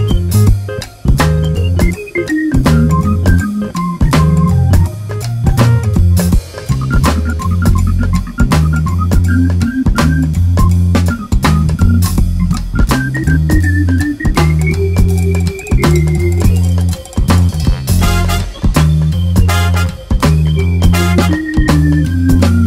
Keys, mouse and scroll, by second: 0.7-3.0 drag, 0.8 a, 0.9 `, 8.5 alt+a, 8.7 `, 10.3 click, 10.6 click, 10.8 Delete, 13.5-14.4 drag, 16.1 drag, 17.4 drag, 18.2-22.1 drag, 18.9 scroll down 1, 19.0 alt+a, 19.4-19.8 scroll up 1, 21.1 scroll down 1.